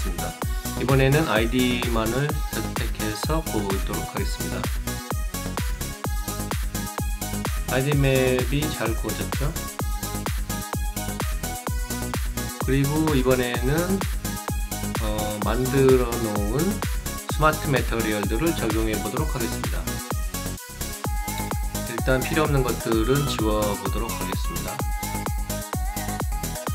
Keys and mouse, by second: 0.4 click, 1.4 click, 3.2 click, 4.1 click, 5.0 click, 5.7 click, 18.0 click, 22.9 click, 23.3 right click, 24.6 click, 25.6 click, 25.9 right click.